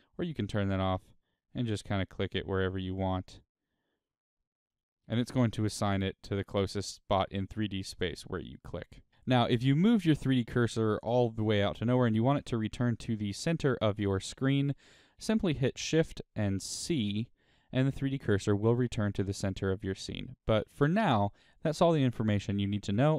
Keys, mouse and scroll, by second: 0.2 click, 0.9 click, 1.5 click, 2.2-3.2 middle drag, 3.2 click, 4.7-5.5 middle drag, 5.5 click, 6.0-7.2 middle drag, 7.2 click, 7.9-9.1 middle drag, 9.1 click, 9.3-10.0 middle drag, 10.0 click, 10.6 click, 11.0 click, 11.3 click, 11.6 click, 12.0 click, 12.4 click, 12.9 click, 14.4 click, 16.0 shift+c, 17.3-21.3 shift+middle drag.